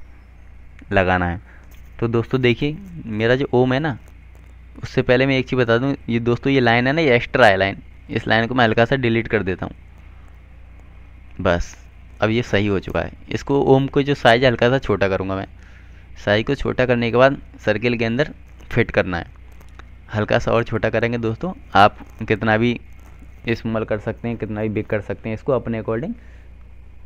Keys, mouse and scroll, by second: 2.3 click, 3.9 click, 8.7 click, 10.6 Delete, 13.4 click, 21.9 F2, 23.3 click.